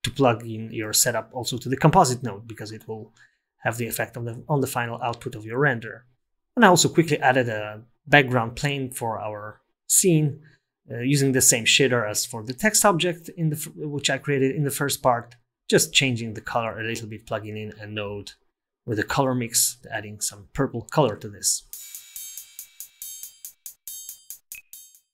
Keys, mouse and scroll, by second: 6.1 middle click, 6.1 scroll down 5, 6.3 scroll up 2, 6.7 shift+a, 8.1 click, 9.0 click, 9.3 scroll up 5, 9.4 middle click, 9.8 click, 11.1 middle click, 11.5 click, 12.5 click, 12.9 click, 17.5-17.9 scroll down 4, 18.1 click, 21.0 click, 21.3 click.